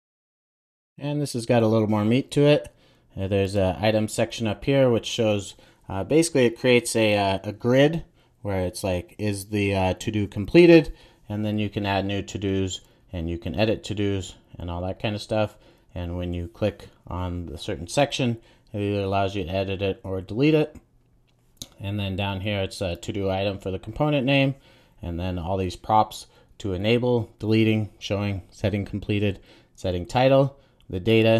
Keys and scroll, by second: 0.1 super+s.